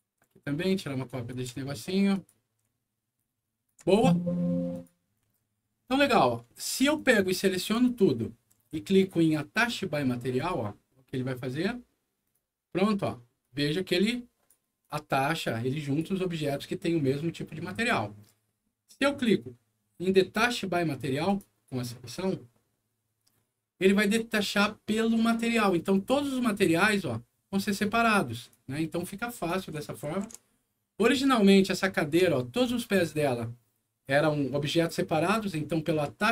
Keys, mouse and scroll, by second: 0.8 shift+click, 2.1 shift+click, 3.1 shift+click, 3.8 shift+click, 4.7 shift+click, 5.2 alt+middle click, 6.0 alt+click, 6.4 alt+middle click, 6.9 alt+click, 10.3 click, 12.2 click, 12.7 click, 13.3-14.4 drag, 14.7-15.9 drag, 17.4 middle click, 21.2 click, 26.6-27.7 drag, 28.4 click, 30.0 ctrl+z, 30.7 ctrl+middle click, 31.4-31.9 ctrl+scroll up 3, 31.9 ctrl+alt+middle click, 35.2 alt+scroll down 2.